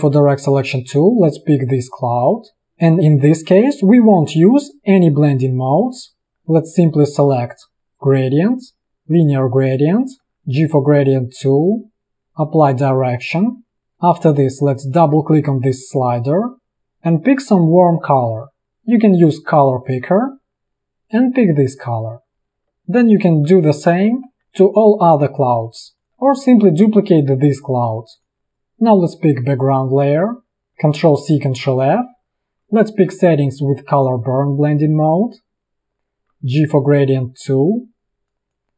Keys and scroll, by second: 2.6 space, 10.2 g, 13.8 space, 22.7 v, 23.5 ctrl+c, 24.0 ctrl+f, 25.6 i, 26.1 v, 28.5 a, 31.1 ctrl+c, 31.7 ctrl+f, 32.6 i, 36.4 g.